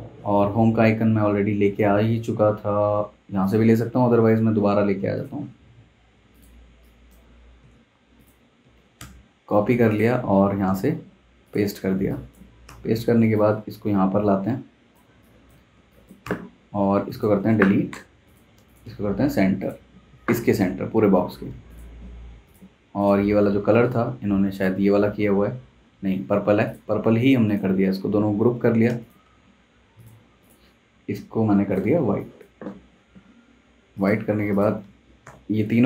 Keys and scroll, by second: 7.6 super+c, 8.6 super+c, 9.0 super+Tab, 10.7 super+v, 11.8 z, 12.7 v, 15.1 space, 15.7 z, 16.2 v, 17.9 BackSpace, 35.2 super+g.